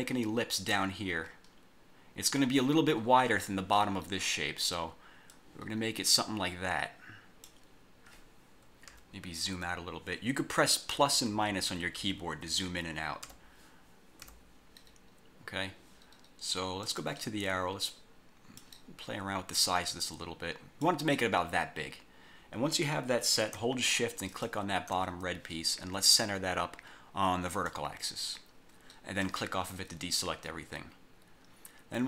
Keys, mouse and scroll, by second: 1.6 scroll down 1, 5.5-7.8 drag, 9.0 -, 11.1-14.3 typing, 15.1 scroll up 1, 15.3 scroll down 1, 16.9 click, 17.9 click, 19.7-21.1 drag, 24.4 shift+click, 27.7 click, 29.3 click.